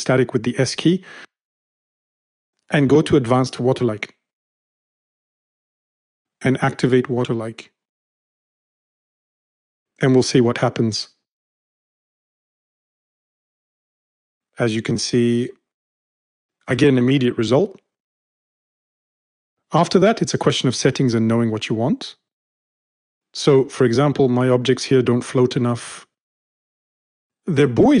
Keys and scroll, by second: 0.3 s.